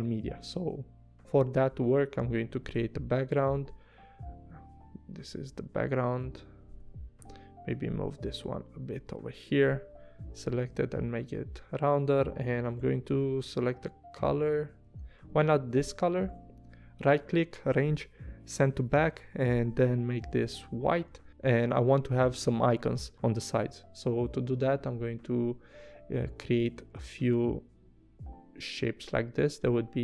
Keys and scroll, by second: 6.8 a, 9.9 v, 10.5 a, 12.7 i, 14.8 super+z, 15.7 v, 20.3 i, 21.0 v.